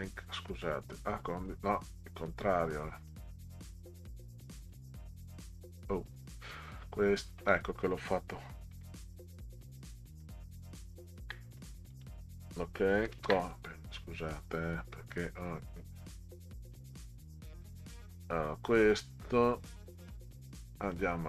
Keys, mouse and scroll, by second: 0.6 click, 3.0 right click, 3.6 click, 4.6 click, 8.7 ctrl+z, 10.1 ctrl+z, 11.9 click, 13.0 ctrl+c, 13.2 ctrl+v, 15.1-16.7 drag, 17.3 click, 20.8 click.